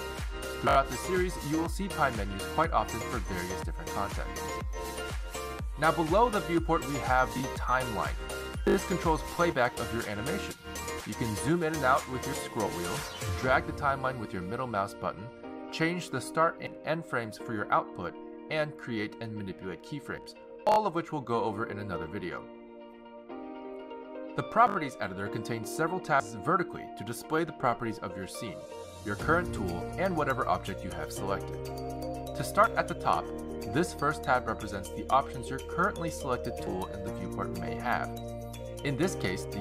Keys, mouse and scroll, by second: 1.9 z, 3.4 shift+s, 8.6 click, 9.6 click, 11.6 click, 12.7-13.3 scroll down 6, 13.3-13.9 scroll up 5, 13.9-14.3 scroll down 3, 14.3-15.0 scroll up 4, 15.4 middle click, 17.9 click, 20.0 click, 22.0 i, 23.9 click, 27.9 click, 34.4 click, 37.3 t, 38.3 click, 39.0 t.